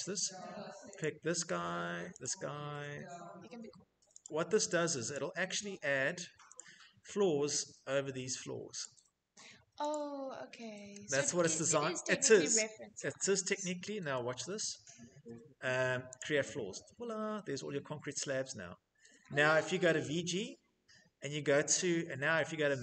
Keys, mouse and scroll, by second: 0.4 click, 1.7 click, 3.6 click, 4.5 click, 5.0 middle click, 5.0 middle click, 6.0 click, 8.2 click, 9.3 click, 11.0 click, 11.7 click, 12.9 click, 13.2-13.9 scroll, 15.6 click, 17.0 middle click, 17.1 middle click, 17.2 middle click, 17.3 Escape, 17.4 middle click, 17.5 middle click, 17.6 Escape, 17.6 middle click, 18.5 middle click, 18.5-18.9 scroll, 19.0-19.9 typing, 20.7-22.2 scroll, 22.2 scroll.